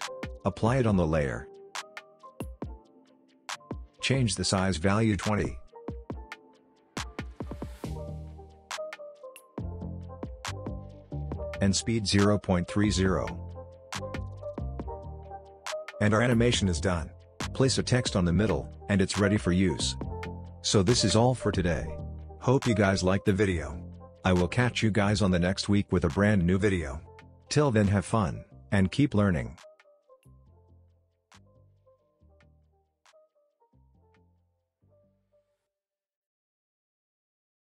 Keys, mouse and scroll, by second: 0.2-1.2 typing, 3.3 typing, 5.9-9.7 typing, 13.4 typing, 13.6 click, 16.4-17.3 click, 17.3 space.